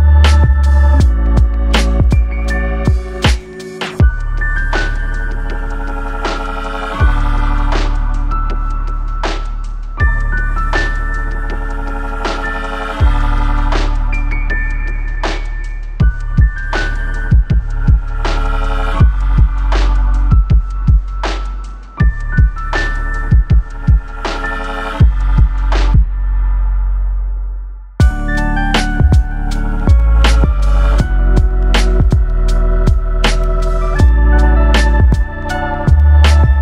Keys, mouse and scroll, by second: 3.3 click, 3.7 right click, 7.0 1, 7.2 click, 7.8 g, 23.2 middle click, 23.8 KP_1, 24.6 shift+middle click, 25.2 2, 25.5 click, 26.1 g, 33.2 click, 33.8 Tab, 34.1 Tab, 34.6 1, 34.7 click, 35.2 g.